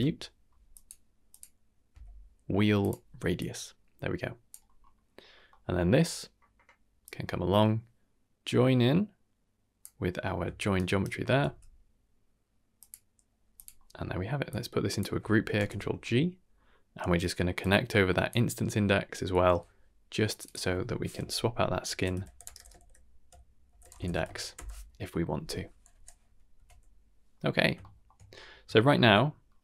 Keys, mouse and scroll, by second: 1.3-2.9 drag, 3.3-4.6 drag, 4.7 scroll down 2, 4.9 middle click, 5.3-7.0 scroll down 3, 5.4 middle click, 7.0-9.8 drag, 10.7 shift+right click, 11.4 g, 13.5 click, 13.7 middle drag, 14.1-14.4 scroll up 2, 14.4 click, 15.5 ctrl+g, 16.4 scroll up 2, 17.2-17.6 scroll up 1, 17.6-18.3 drag, 19.3 n, 20.2 click, 20.4-24.5 drag, 26.5 Tab, 27.4 middle drag, 27.8 shift+middle drag, 28.2-28.6 scroll up 5, 28.6 shift+scroll down 1, 28.7 shift+middle drag, 29.2 scroll up 2, 29.4-29.6 middle drag.